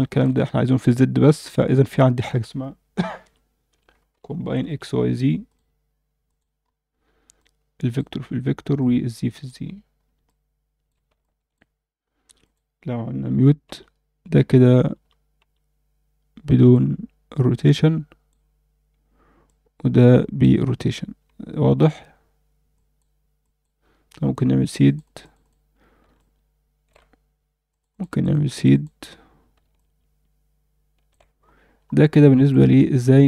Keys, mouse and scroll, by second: 0.0 alt+shift+middle click, 1.6 shift+a, 6.6 scroll up 2, 7.3-8.0 drag, 8.8 click, 9.3 click, 9.9 scroll up 1, 10.3-11.5 alt+middle drag, 12.4 click, 13.6 m, 14.5 m, 14.9 m, 15.4 m, 16.7-18.3 drag, 19.5-20.4 drag, 21.4 scroll down 2, 21.6 alt+a, 22.7 click, 23.4 click, 24.6 click, 24.8 click, 25.2 click, 25.4 click, 26.2 shift+middle click, 27.7 click, 27.9 click, 28.1 click, 28.3 click, 28.7 click, 29.3-30.1 scroll down 2, 29.8-31.1 alt+shift+middle drag, 31.4-31.7 scroll up 1, 31.7 scroll down 1, 32.4 click, 32.8 alt+middle click.